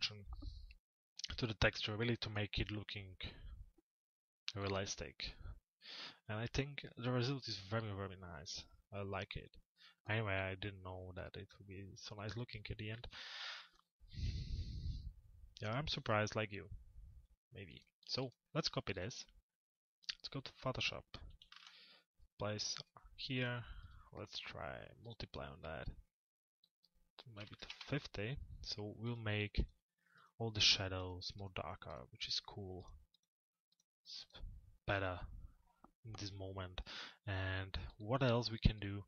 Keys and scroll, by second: 27.3 Return.